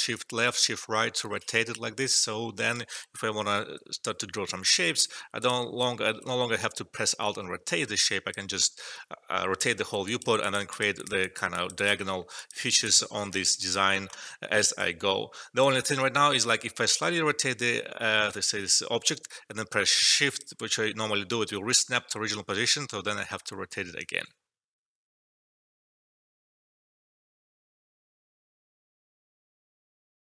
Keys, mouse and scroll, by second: 0.4 shift+Right, 1.3 shift+Left, 2.7 alt+right click, 3.7 c, 4.4 alt+middle click, 4.8 e, 5.3-8.9 drag, 8.9 ctrl+z, 10.0 click, 12.0 alt+middle click, 12.3 click, 13.3 alt+middle click, 13.5 click, 14.1 alt+middle click, 14.6 alt+right click, 15.6-21.9 alt+drag, 21.9 alt+middle click, 23.2 shift+Right.